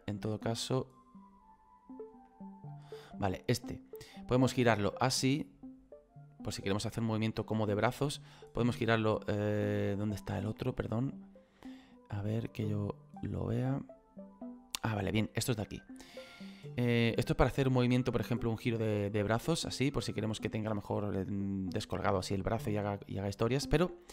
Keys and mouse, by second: 1.2 click, 7.9 right click, 8.6 click, 9.7 ctrl+z, 9.9 middle click, 11.1 middle click, 15.3 middle click, 16.8 middle click, 17.8 middle click, 18.9 click, 23.3 middle click.